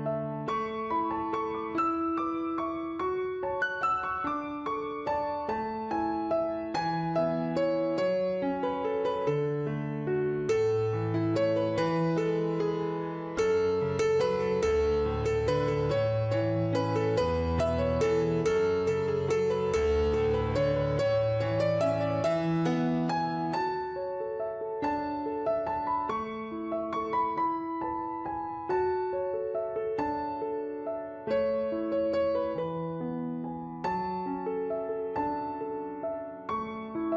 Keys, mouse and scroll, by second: 2.1 click, 2.5-4.5 typing, 2.6 Return, 2.9 click, 3.2 Return, 5.1 click, 6.5 right click, 6.9 click, 8.1 w, 8.4 click, 9.6 click, 10.6 click, 15.9 ctrl+click, 16.0 ctrl+z, 16.3 right click, 16.8 click, 23.3 click, 25.3 click, 29.0 right click, 29.4 click, 30.9 right click, 31.5 click, 31.8 w, 32.2 click, 34.1 click, 34.4 4, 34.7 Return, 34.9 click.